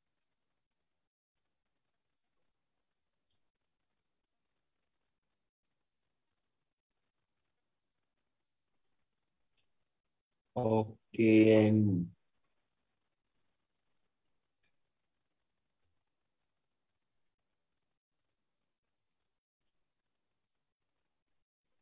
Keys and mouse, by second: 3.0-10.9 typing, 15.6 d, 16.0 o, 16.6 space, 17.2 a, 19.8 space, 21.2-21.8 typing.